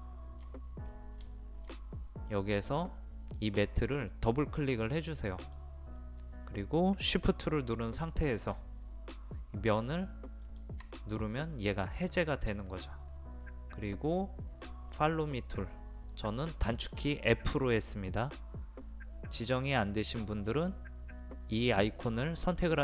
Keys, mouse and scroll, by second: 0.0 shift+middle click, 0.5-1.3 scroll down 1, 1.3 shift+middle click, 1.7-5.1 scroll down 1, 5.1 click, 10.5 shift+click.